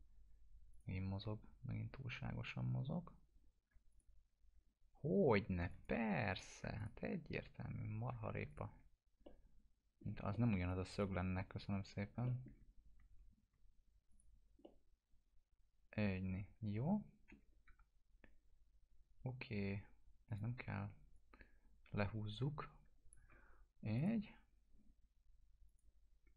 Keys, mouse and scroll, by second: 0.7 click, 1.2 scroll up 1, 3.9 ctrl+click, 5.6 click, 5.9 1, 6.3 click, 6.7 ctrl+click, 8.4 ctrl+click, 9.2-10.1 middle click, 10.0 scroll down 1, 10.3 alt+middle click, 10.6-11.3 alt+drag, 12.2 alt+middle click, 12.7 scroll up 1, 13.3 scroll down 1, 14.0 alt+click, 14.6-17.4 alt+middle drag, 17.6 w, 20.2 click, 21.1-23.3 shift+drag, 24.3-24.8 scroll up 1, 25.6 click, 26.2 scroll down 1.